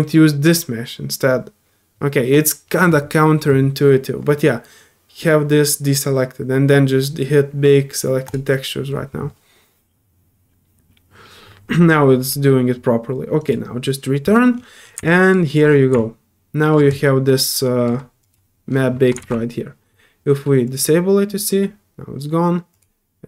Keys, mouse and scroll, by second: 8.3 drag, 13.4 click, 15.0 alt+click, 15.5 middle click, 15.9 click, 16.9 click, 18.2 click, 20.6 click, 22.7 click.